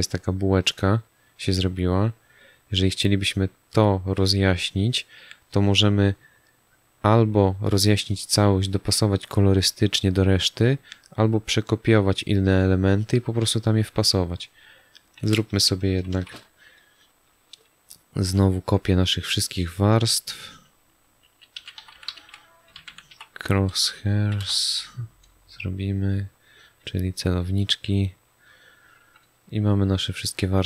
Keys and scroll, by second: 16.0 ctrl+alt+shift+e, 21.5 c, 22.6-23.5 typing, 24.3 Return.